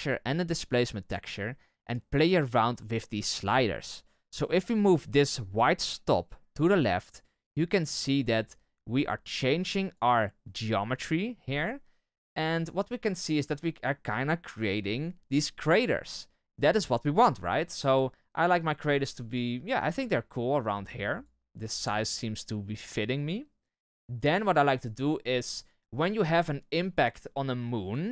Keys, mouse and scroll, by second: 6.0-25.3 drag, 25.3-28.1 scroll up 1.